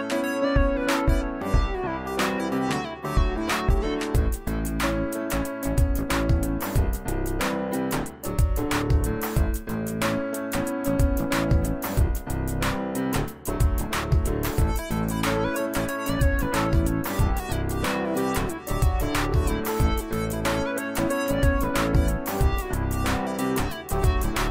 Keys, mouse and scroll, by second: 8.6 click, 13.5 click, 22.7 click.